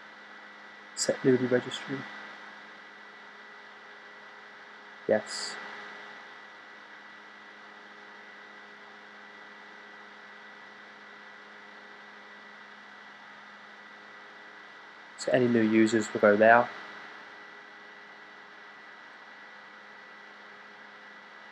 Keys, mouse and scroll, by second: 14.2 click.